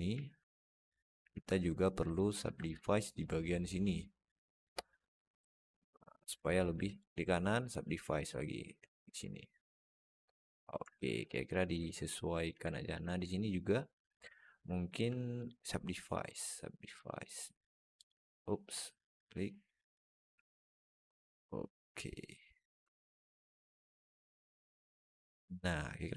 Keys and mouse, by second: 0.9 click, 2.0 alt+shift+middle click, 3.1-4.4 drag, 5.3 click, 9.2 click, 9.9 click, 10.7 Tab, 11.1 alt+middle click, 11.6 Tab, 12.3 click, 12.6 alt+shift+middle click, 14.7 shift+click, 16.8 click, 18.8 click, 19.8-22.3 drag, 22.7 Tab, 23.1-25.5 alt+middle drag.